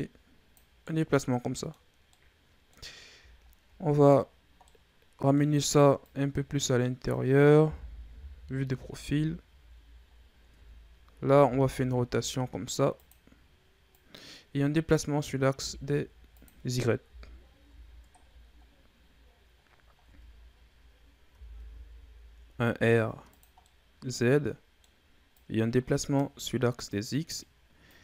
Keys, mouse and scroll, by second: 0.7-2.8 middle drag, 2.8-4.5 scroll up 6, 4.5-5.9 middle drag, 5.9-7.6 drag, 7.6 KP_3, 8.6 Tab, 8.9 a, 9.4-10.0 scroll down 3, 10.0-10.4 scroll up 5, 10.4 Tab, 11.3 r, 13.8-15.4 drag, 15.4 r, 16.9 KP_1, 17.6 Tab, 18.0-19.4 scroll down 8, 19.4-19.9 scroll up 8, 19.9 Tab, 21.1 r, 23.5-25.2 middle drag, 25.2-28.0 drag.